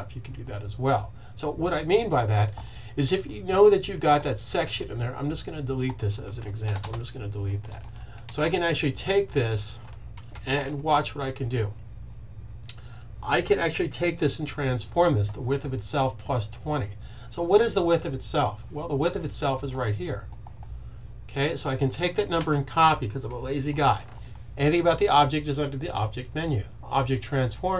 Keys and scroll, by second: 10.0 super+z, 22.3 super+c.